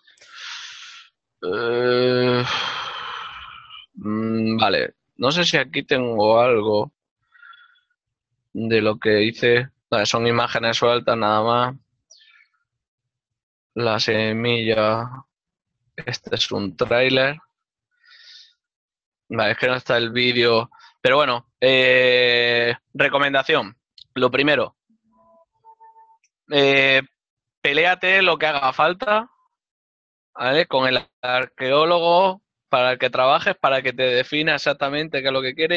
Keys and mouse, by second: 6.6 click, 17.5 click, 26.0 click, 32.3 click.